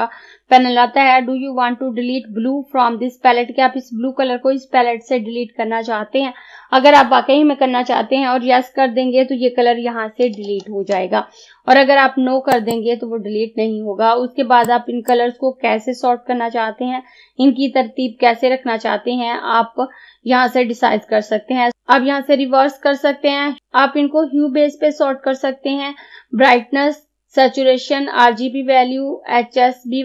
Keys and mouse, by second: 12.6-30.0 drag.